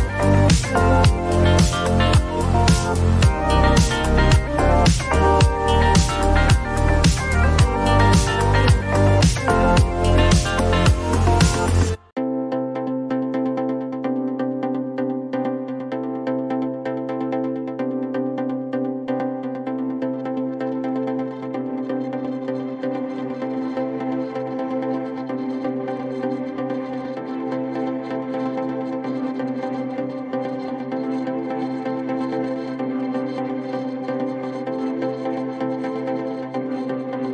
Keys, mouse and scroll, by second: 0.4 click, 1.5 click, 2.8 click, 4.8 a, 12.7 click, 12.8 click, 15.1 click, 18.6 click, 20.0 click, 21.5 click, 23.1-24.1 typing, 24.4 click, 26.6 click, 28.1 6, 29.7 5, 30.7 Return, 32.2 click, 33.1 ctrl+d, 35.5 click.